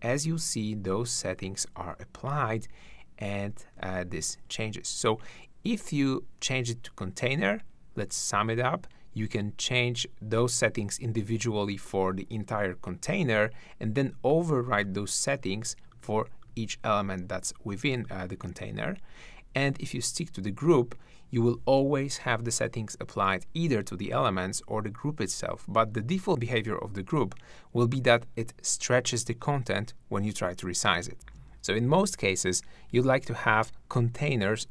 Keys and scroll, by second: 3.8 super+z, 31.3 shift+`.